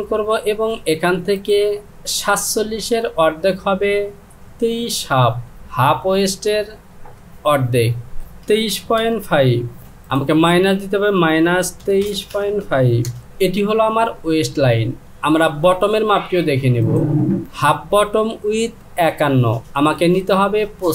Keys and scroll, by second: 7.0 Down, 8.5 KP_2, 8.6 KP_3, 9.0 KP_Decimal, 9.8 KP_5, 11.2 KP_Subtract, 11.8 KP_2, 12.0 KP_3.